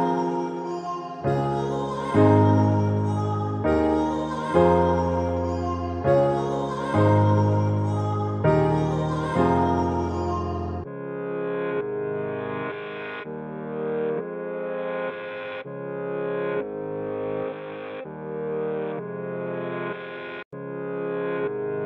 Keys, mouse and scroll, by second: 4.8-6.2 typing, 12.2 click, 13.5-13.8 click, 14.9-15.7 typing, 18.0-20.2 drag, 21.1-21.8 typing.